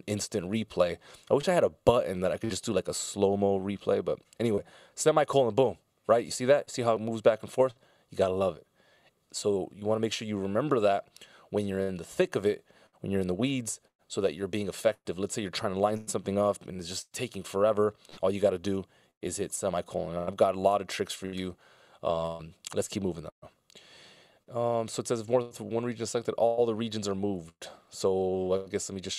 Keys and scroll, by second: 4.8 i, 8.0 super+z, 20.6 super+z.